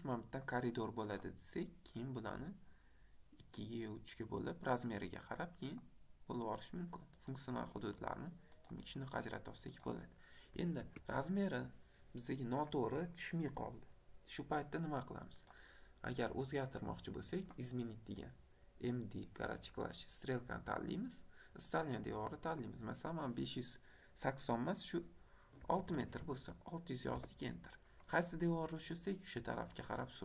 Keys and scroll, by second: 10.8 Escape, 25.7 KP_6, 25.8 KP_0, 27.1 Return.